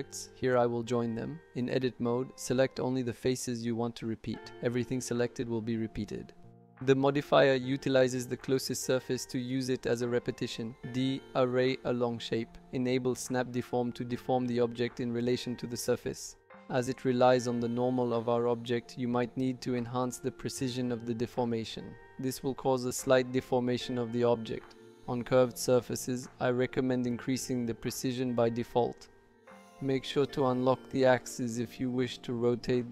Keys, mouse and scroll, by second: 0.7 shift+click, 5.0 Tab, 5.9 click, 7.4 ctrl+l, 9.5 shift+click, 10.5 click, 11.8 click, 12.3 shift+middle click, 12.8-14.6 drag, 15.4 click, 17.9 click, 18.1 click, 18.3 click, 18.6-20.6 shift+drag, 19.5 shift+middle click, 21.3 click, 21.9 shift+middle click, 22.6 middle click, 23.3 shift+middle click, 24.4 click, 25.5 click, 27.5 shift+middle click, 28.1 middle click, 30.4 click, 31.3-32.9 drag.